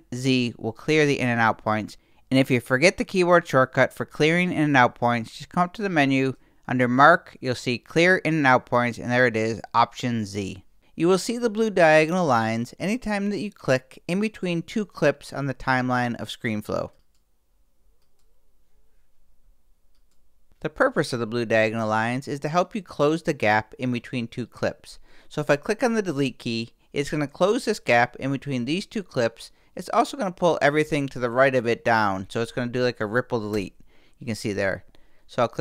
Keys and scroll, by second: 0.2 alt+z, 1.2 alt+shift+z.